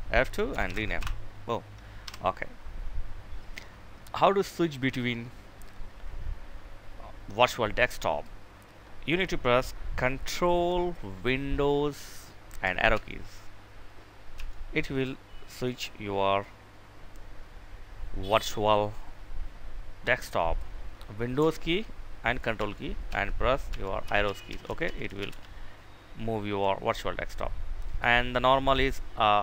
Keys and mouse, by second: 0.0-0.6 typing, 1.4 Delete, 12.2 ctrl+super+Right, 13.8 Right, 22.0 ctrl+super+Left, 22.4 ctrl+super+Right, 23.1 ctrl+super+Up, 23.4 ctrl+super+Down.